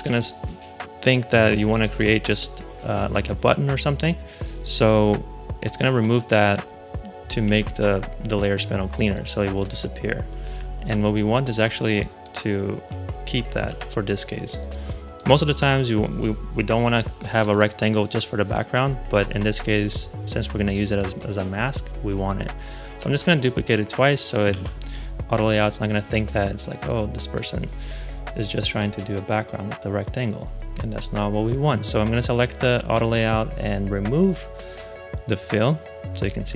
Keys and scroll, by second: 7.3 shift+a, 10.3 super+z, 13.5 super+d, 24.4 shift+a.